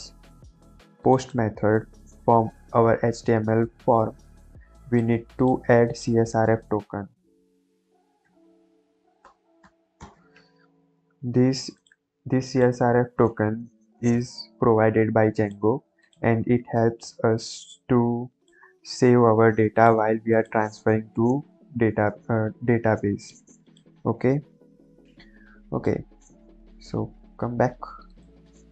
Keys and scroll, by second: 6.5 Return, 8.2 c, 8.5 s, 9.2 r, 9.5 f, 9.9 Return, 10.4 ctrl+s, 26.0 Caps_Lock.